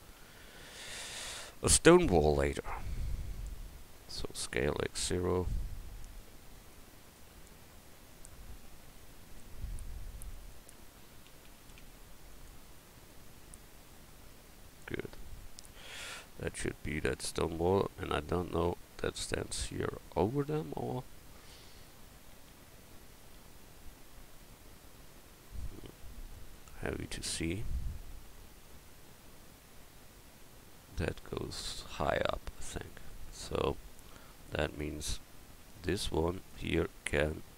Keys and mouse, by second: 0.9 ctrl+z, 4.4 s, 6.6-7.8 right drag, 11.3 s, 13.1-14.8 drag, 15.0 Tab, 26.7 KP_1, 35.6 Tab.